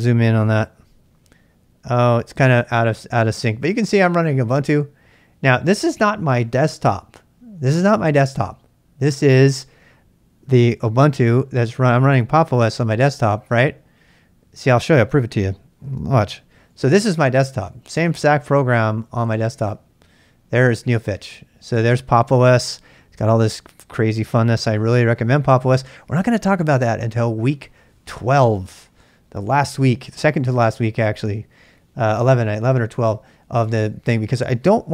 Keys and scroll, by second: 0.5 z, 15.8 ctrl+b, 16.3 c, 17.4-19.6 typing, 24.7-25.8 typing.